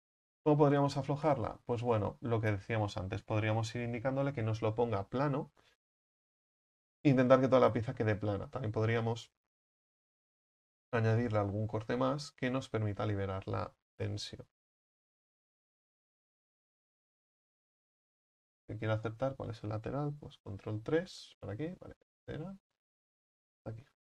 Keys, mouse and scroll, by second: 1.3-7.9 right drag, 7.9 middle click, 8.0-10.4 middle drag, 10.4 right click, 11.1 right click, 11.5-15.8 middle drag, 15.8-16.2 scroll down 4, 16.2 KP_1, 17.9-19.1 scroll up 8, 19.1 Right, 20.6 ctrl+KP_3, 21.7-22.5 scroll down 3, 22.5-23.2 scroll up 2, 23.2 ctrl+right click.